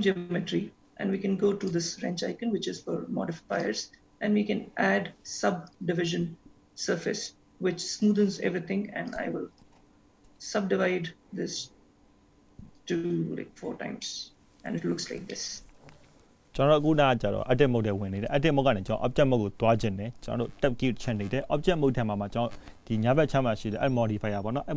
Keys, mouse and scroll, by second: 1.6 click, 3.6 click, 9.1 click, 9.5 click, 12.7 click, 14.1 middle click, 14.8-15.5 scroll down 2, 15.5 middle click, 20.0-22.8 scroll up 2, 22.8-23.4 scroll down 1.